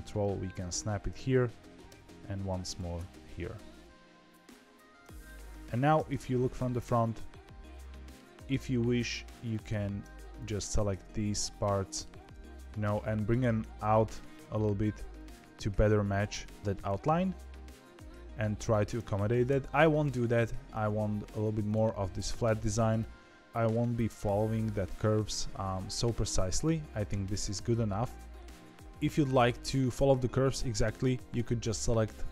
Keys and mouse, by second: 1.8 e, 3.0-5.2 middle drag, 5.9 KP_1, 7.4 middle click, 9.4 click, 11.5 middle click, 12.6 KP_3, 12.8 KP_1, 13.3 g, 15.3 g, 16.7-18.3 middle drag, 19.4 ctrl+z, 19.9 middle click, 20.8 Tab, 21.6 click, 23.4-25.5 middle drag, 23.4 z, 26.1 middle click, 27.4 middle click, 28.8 middle click, 30.9 click.